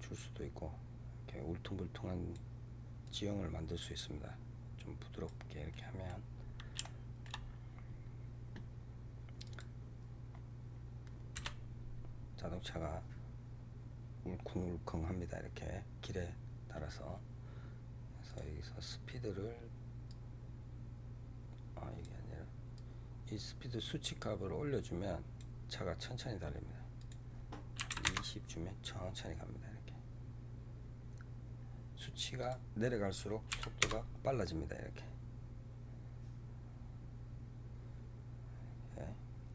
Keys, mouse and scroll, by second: 2.9-5.6 drag, 5.6-6.2 middle drag, 6.2 scroll up 4, 6.7-7.3 shift+middle drag, 7.3 scroll up 2, 9.3 click, 10.3-10.7 scroll down 3, 11.3 KP_0, 18.2 click, 20.0-25.7 drag, 26.9-29.9 drag, 30.5-31.4 scroll up 3, 32.3-35.4 drag.